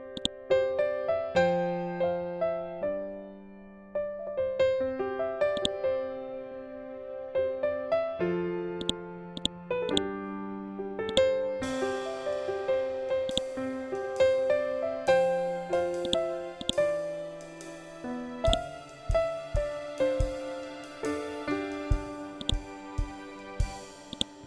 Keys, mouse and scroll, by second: 5.0-8.2 drag, 8.3 click, 12.8-14.4 drag, 19.3 scroll up 1, 21.9-24.4 drag.